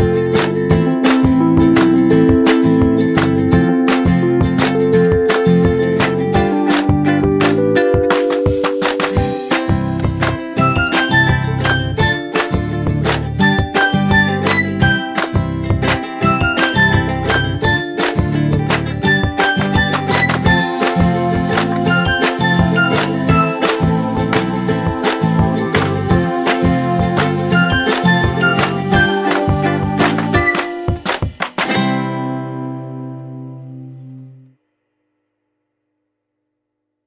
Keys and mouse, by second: 1.5 2, 2.8 click, 3.5 3, 4.9 click, 5.5 4, 7.1 click, 7.9 5, 10.3 click, 11.0 m, 12.2 click, 12.5 right click, 15.9 click, 17.4 click, 21.7 shift+click, 24.2 ctrl+g, 26.7 right click, 28.3 click.